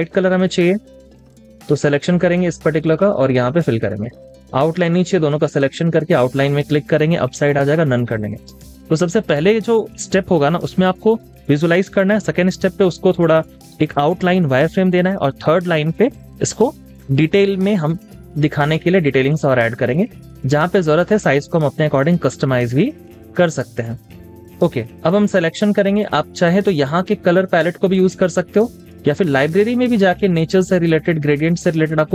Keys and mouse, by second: 0.7 ctrl+z, 4.3 double click, 8.1 double click, 8.3 space, 8.6 double click, 8.8 space, 19.3 shift+click, 22.3 space, 22.6 double click, 22.8 space, 26.9 double click, 27.1 click.